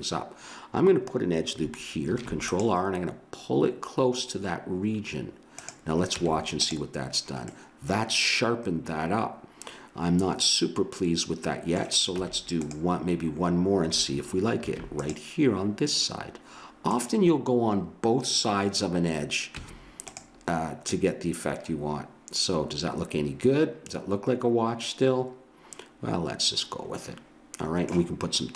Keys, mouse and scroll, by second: 2.1 ctrl+r, 6.2 Tab, 12.1 Tab, 14.6 ctrl+r, 19.6 Tab.